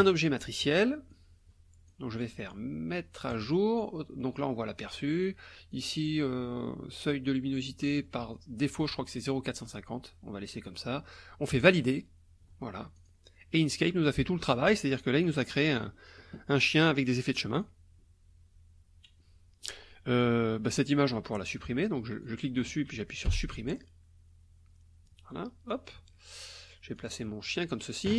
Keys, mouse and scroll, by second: 0.0 click, 1.1 click, 3.3 click, 5.7 click, 11.6 click, 12.9 click, 13.7 click, 15.2 click, 16.8 click, 17.5 click, 20.2 click, 22.2-22.7 drag, 23.3 Delete, 25.7-27.1 drag, 27.2 click.